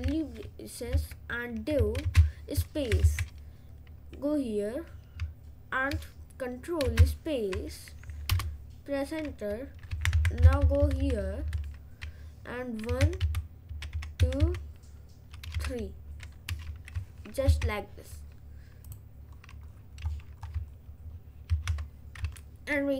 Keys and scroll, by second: 1.0 Right, 1.9 Left, 2.1 space, 2.6 Right, 6.9 ctrl+space, 8.4 Return, 10.5 Left, 14.0 Left, 14.0 2, 14.2 Down, 17.5 ctrl+s.